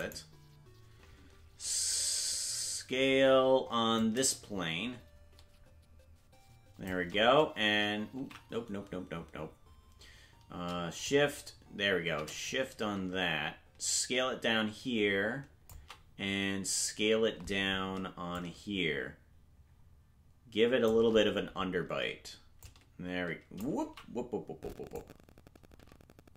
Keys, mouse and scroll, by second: 0.2 right click, 3.9-6.9 drag, 8.7 ctrl+z, 11.0-15.7 shift+drag, 18.3-20.9 drag, 22.6-23.6 shift+drag, 24.4 ctrl+z, 24.9-26.3 drag.